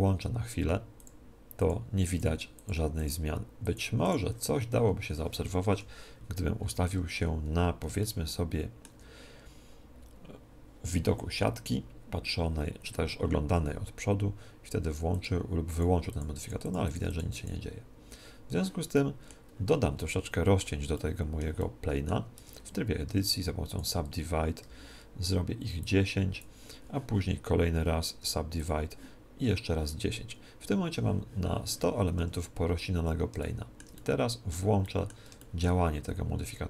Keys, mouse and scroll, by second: 1.0-6.0 drag, 5.6 KP_1, 7.3-8.0 scroll up 1, 8.0-9.8 middle drag, 15.0-19.2 drag, 19.0-23.4 middle drag, 22.3 Tab, 23.0 w, 24.6 t, 25.8-27.7 drag, 28.2 w, 32.2 Tab, 33.5-36.6 middle drag.